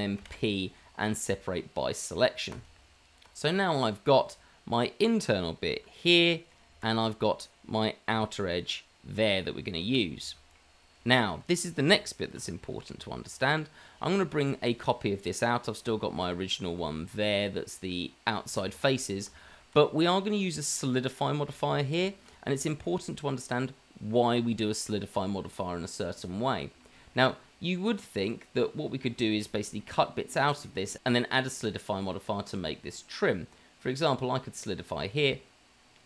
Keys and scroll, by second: 0.2 p, 2.8 Tab, 5.7 g, 8.1 g, 12.6 shift+d, 14.5 shift+d, 16.8 g.